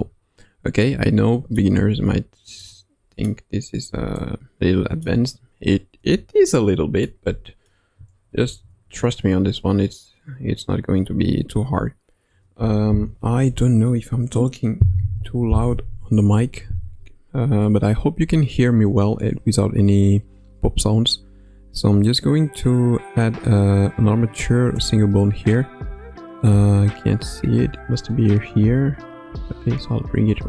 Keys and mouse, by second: 1.0-1.6 middle drag, 1.7 KP_1, 2.5-3.3 middle drag, 4.1-5.0 middle drag, 5.9 KP_1, 7.0-7.7 middle drag, 8.3 shift+a, 28.4 g.